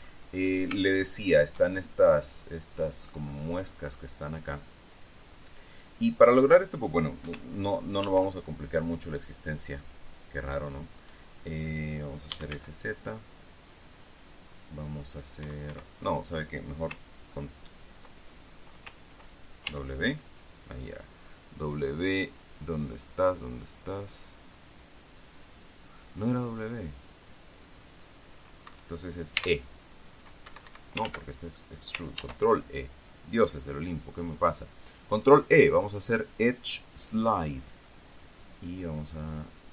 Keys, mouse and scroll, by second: 1.3 shift+middle click, 8.6 ctrl+r, 10.4 click, 11.2 click, 12.9 z, 16.2 Escape, 20.2 w, 29.2 Escape, 29.9 e, 31.0 Escape, 31.8 ctrl+z, 32.7 ctrl+e, 38.2 click.